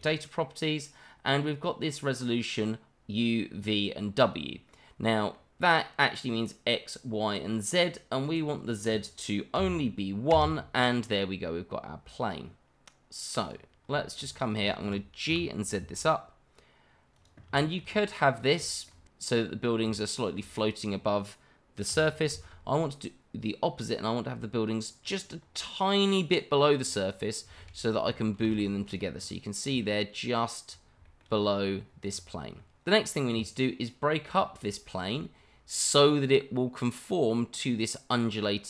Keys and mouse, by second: 4.7-5.3 middle drag, 8.2-10.3 drag, 13.4 click, 14.0 shift+middle drag, 14.7 shift+middle drag, 15.3 g, 15.7 z, 17.6 shift+middle drag, 18.7 shift+middle drag, 21.1-21.5 shift+middle drag, 22.6 z, 27.1 click, 27.6 shift+z, 28.8 click, 31.0 shift+middle click, 32.6-32.9 middle drag, 33.3 shift+middle click, 33.4-33.7 middle drag, 35.2 shift+middle drag, 36.2-37.1 middle drag, 38.5-38.6 middle drag.